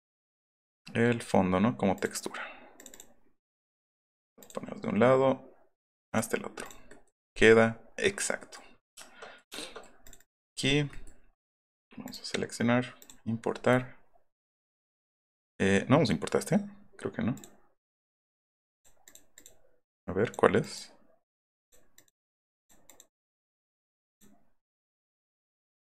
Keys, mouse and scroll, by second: 1.9 click, 2.8 click, 2.9 click, 4.4 click, 6.1 click, 6.6 click, 7.2 middle click, 8.3 middle click, 8.8 shift+middle click, 9.2 shift+middle click, 10.0 scroll up 2, 10.0 middle click, 10.2 middle click, 10.4 middle click, 10.9 middle click, 12.1 click, 13.0 click, 18.7 click, 19.0 click, 19.3 click, 20.0-20.3 drag, 20.6 click, 21.2 click, 21.6 click, 21.9 click, 22.5 click, 22.8 click, 23.2 click, 23.8 click, 24.0 click, 24.6 click, 25.0 click.